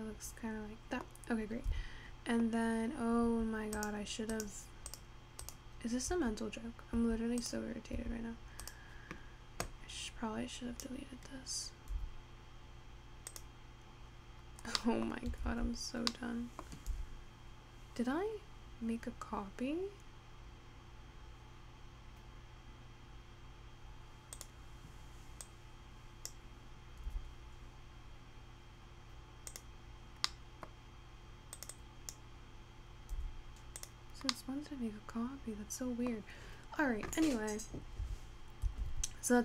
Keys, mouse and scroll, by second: 2.8 Tab, 3.3 Tab, 3.9 click, 6.6 Tab, 9.1 click, 9.8 click, 12.0 x, 14.7 scroll down 3, 14.9-15.9 middle drag, 15.9 ctrl+z, 16.1 scroll down 1, 16.2 middle click, 17.2 x, 25.5 click, 27.1 x, 30.4 middle click, 30.8-31.6 scroll up 4, 31.6 click, 31.8 click, 33.2 x, 34.4-36.6 middle drag, 36.6-37.5 scroll up 1, 37.5-38.2 scroll down 1, 38.2 Tab, 39.1 Tab.